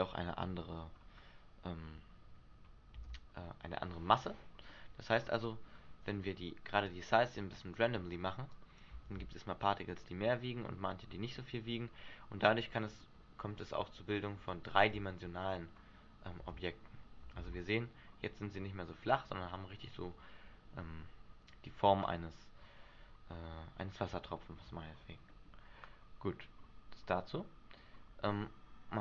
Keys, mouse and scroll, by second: 1.1 scroll down 1, 2.7 scroll down 1, 3.1 alt+a, 4.8 middle click, 7.0 click, 8.7 click, 9.2 alt+a, 11.5 middle click, 12.8 middle click, 13.6 scroll up 2, 14.3 middle click, 17.6 alt+a, 17.7 middle click, 24.5 shift+middle click, 25.5 middle click, 26.5 middle click.